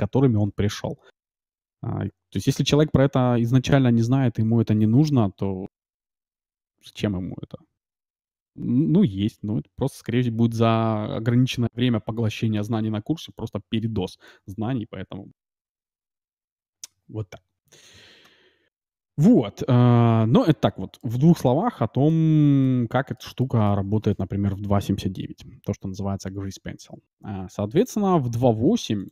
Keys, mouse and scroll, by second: 20.3-25.3 middle drag, 27.8-29.1 drag.